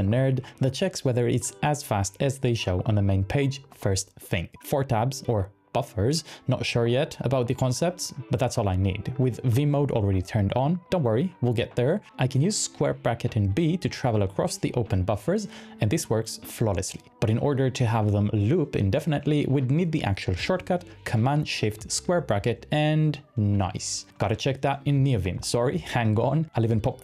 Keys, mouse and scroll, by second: 0.0-3.9 typing, 1.5 super+p, 4.0 Return, 6.6-13.5 typing, 22.6 shift+super+], 22.8 shift+super+], 24.0-27.0 typing, 24.8 Return, 26.4 Return.